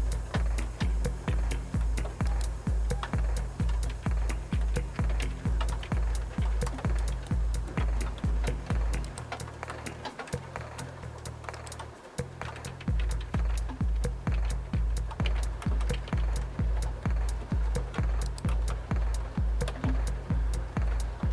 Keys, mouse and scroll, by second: 2.3 click, 3.7-6.4 typing, 9.1 click, 9.8-11.5 drag, 11.6 click, 12.5-16.2 typing, 18.3 click.